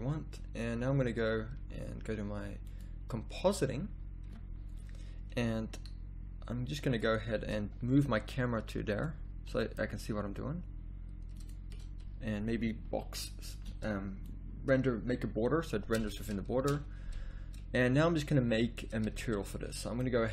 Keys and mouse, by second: 8.0 g, 9.5 g, 13.7 ctrl+b, 16.9 shift+z, 19.1 z, 19.3 z.